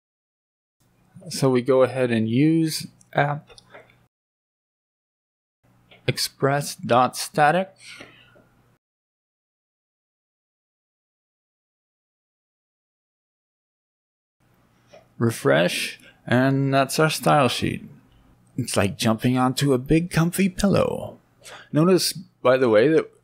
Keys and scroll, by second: 12.2 Right.